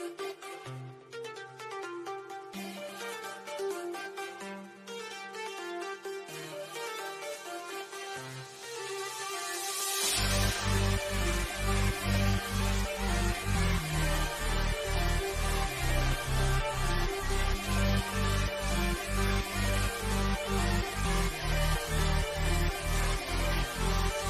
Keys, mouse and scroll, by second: 0.1 Left, 3.0 scroll up 1, 6.6 click, 10.6 scroll down 1, 11.6 click, 12.5 Down, 16.2 Down, 23.6 Down.